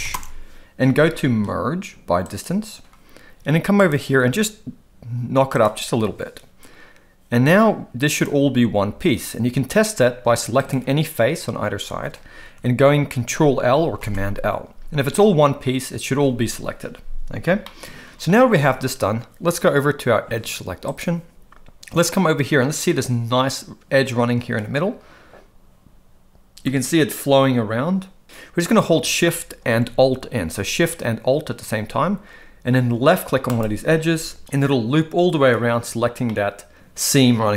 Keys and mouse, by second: 3.7 click, 5.5 click, 8.2 click, 10.6 click, 14.0 ctrl+l, 17.6 shift+middle click, 18.6 alt+a, 33.5 alt+shift+click, 36.3-37.5 middle drag.